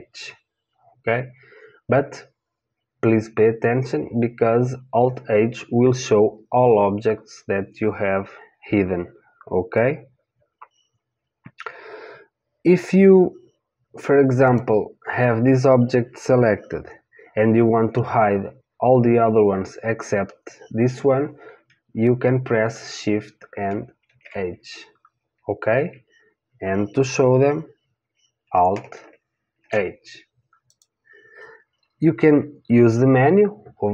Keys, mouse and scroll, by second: 14.5 click, 24.0 shift+h, 29.6 alt+h, 30.7 click.